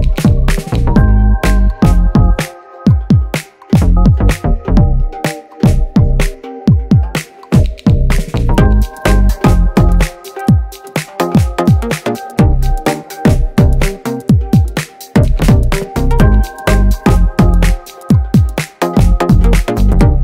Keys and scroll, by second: 2.0 space, 5.1 space, 13.6 space, 13.8 space.